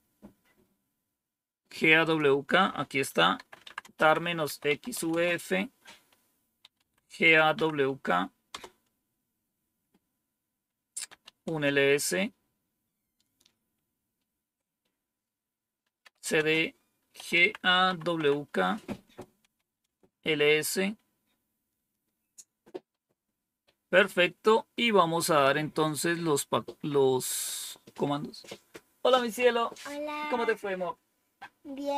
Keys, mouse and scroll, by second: 1.9 click, 3.0-7.7 typing, 8.4 Return, 11.2-11.9 typing, 15.7-19.8 typing, 18.9 Return.